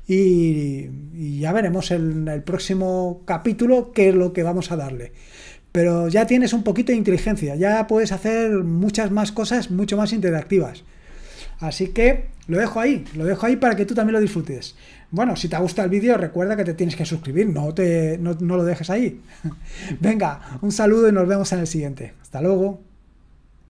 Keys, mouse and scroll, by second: 23.5 click.